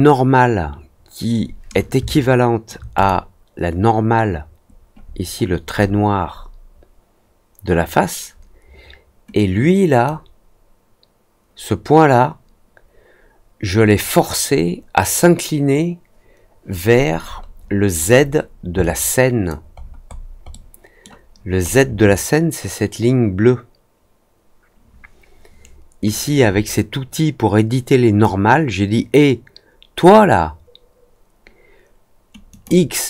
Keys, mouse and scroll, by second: 2.0-2.6 alt+drag, 2.9 click, 5.1-6.5 scroll up 3, 9.3-10.0 drag, 16.9-18.4 scroll down 5, 18.7-19.4 alt+drag, 19.7-20.2 alt+scroll up 2, 20.4 alt+middle click, 21.2-21.8 alt+scroll up 2, 26.1-28.1 drag, 32.4 click.